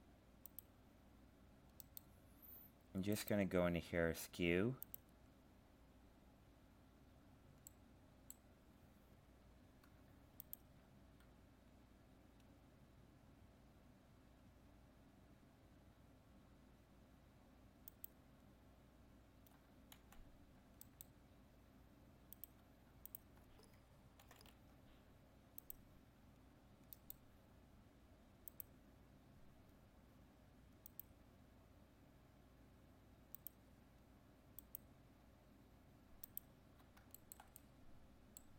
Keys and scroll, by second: 20.0 ctrl+z, 24.2 ctrl+c.